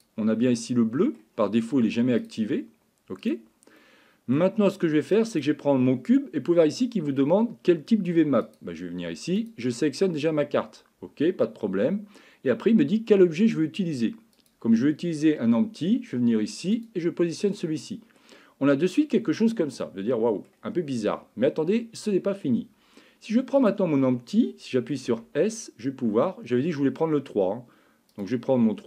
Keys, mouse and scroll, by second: 0.5 middle click, 2.3-3.7 drag, 3.8 middle click, 5.3 click, 8.4-9.5 drag, 14.5 click, 17.6 middle click, 19.8 middle click, 23.6 click, 25.1 s.